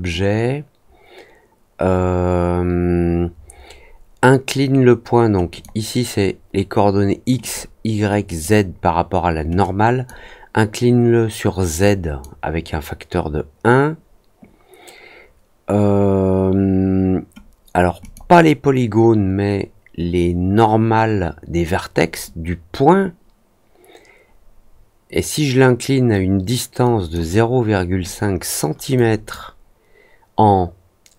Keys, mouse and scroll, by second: 5.4 click, 7.3 click, 8.2 click, 9.6 click, 11.8 click, 17.9 click, 26.8 click, 28.9 click.